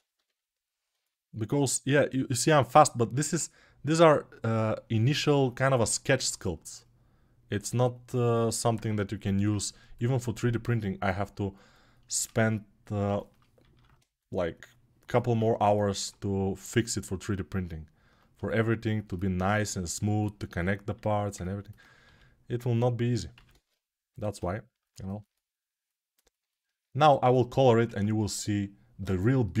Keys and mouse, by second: 6.1-11.4 alt+drag, 11.4-21.1 alt+right drag, 21.8 g, 23.9 1, 26.2-29.6 alt+shift+drag, 27.6 ctrl+Tab.